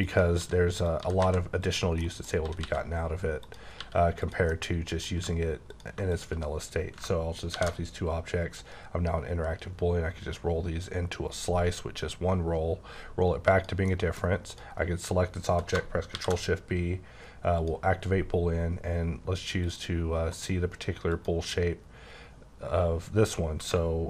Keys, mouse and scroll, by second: 0.0 click, 0.4-1.2 typing, 0.8 click, 1.6 click, 2.0 middle click, 2.4 typing, 3.4 click, 3.8 g, 4.2 click, 4.5 middle click, 5.2 g, 5.7 click, 7.5 b, 9.4 scroll down 2, 9.9-10.5 scroll up 2, 12.4-13.5 scroll down 1, 13.5 click, 13.9 middle click, 14.5 click, 16.1 shift+b, 17.6 click, 19.6 click, 20.3 click, 21.1 click.